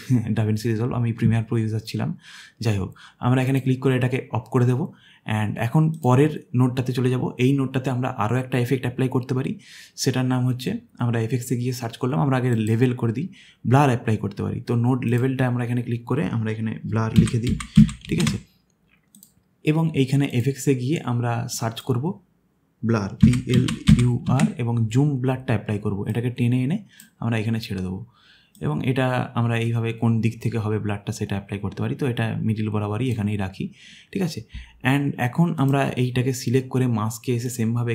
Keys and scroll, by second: 17.1-18.6 typing, 23.0-24.8 typing.